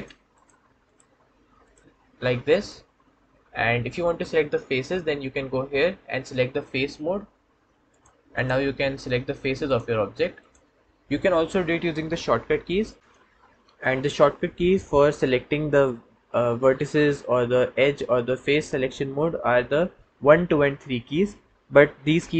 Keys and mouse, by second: 2.5-6.8 drag, 7.8-9.6 drag, 10.3 click.